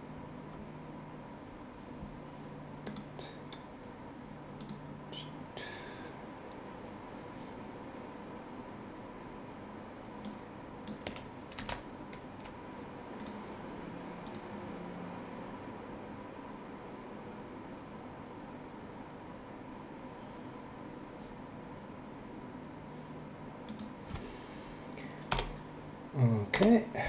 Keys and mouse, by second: 2.8 click, 4.6 click, 10.2 click, 11.5 ctrl+c, 13.2 click, 14.2 click, 23.6 click, 25.3 Return, 25.3 KP_Enter, 26.5 BackSpace.